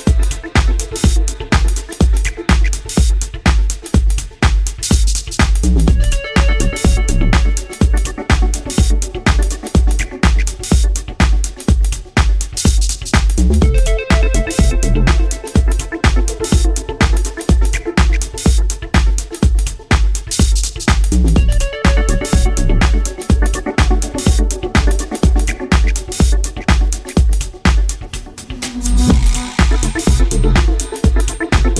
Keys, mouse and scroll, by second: 1.5 right click, 2.0 middle click, 3.3 shift+right click, 3.8 x, 6.5 middle click, 7.6 scroll up 1, 7.9 scroll down 1, 7.9-8.6 scroll down 1, 8.6 scroll down 1, 10.1 KP_1, 11.2 scroll up 1, 11.8 ctrl+r, 14.9 click, 15.7 s, 20.1 click, 20.3-20.7 scroll up 1, 21.6 scroll up 3, 21.7 alt+right click, 22.7 s, 23.5 click, 25.1-25.6 scroll up 2, 26.5 alt+right click, 27.4 alt+shift+right click, 27.9 s, 30.8 click, 31.4 alt+right click.